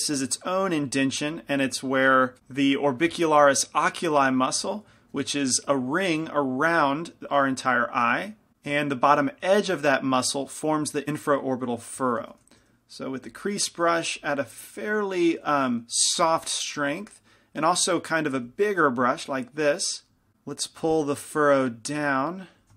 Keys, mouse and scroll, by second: 0.1 click, 0.1 right click, 0.1 shift+c, 0.1 shift+f, 1.5 f, 9.3 middle click, 9.6 middle click, 12.7 shift+c, 12.7 shift+f, 14.0 f, 14.8 middle click, 15.7 shift+f, 17.2 f, 18.6 f, 21.2-22.7 drag.